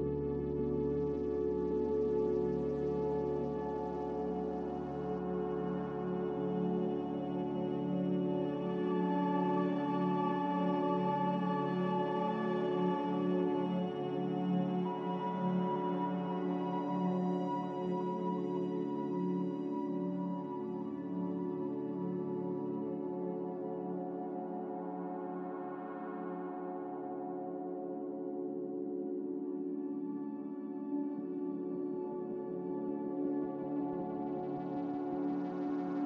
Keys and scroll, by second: 8.8-9.4 typing, 11.7 b, 14.6 Delete, 24.8-25.2 typing.